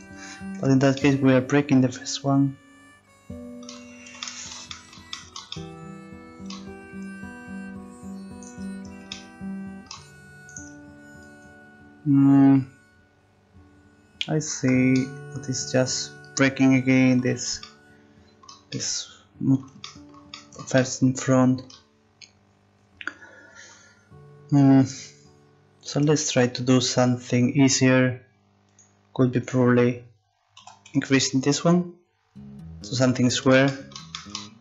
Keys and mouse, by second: 0.6 Tab, 1.8-2.9 middle drag, 3.7 Tab, 8.4 right click, 9.2 right click, 9.5-14.4 middle drag, 14.7 Tab, 20.9-22.7 middle drag, 27.0 Tab, 28.7-30.2 drag, 30.5-33.1 drag, 30.5 s.